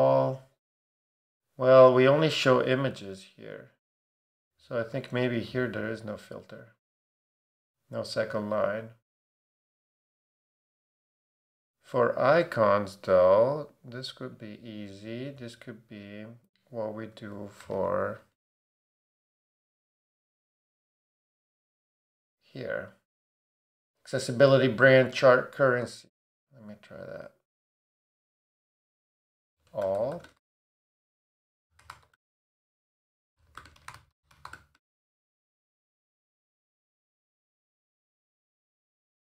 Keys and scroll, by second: 5.7 BackSpace, 17.0-18.3 typing, 29.1-36.2 typing.